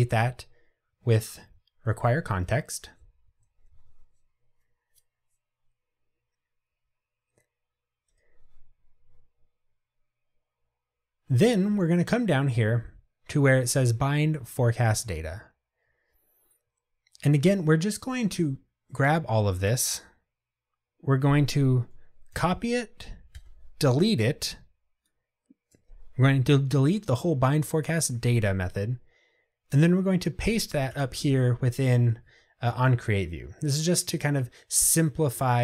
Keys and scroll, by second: 1.9 Return, 22.5 super+c, 31.3 super+v.